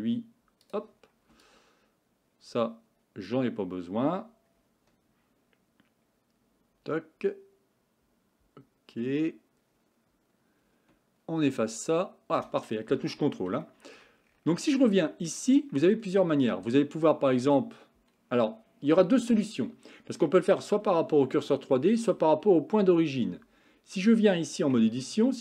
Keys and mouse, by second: 1.5-12.4 ctrl+drag, 13.7 shift+middle click, 15.0 shift+middle click, 16.5 Tab, 24.8 Tab.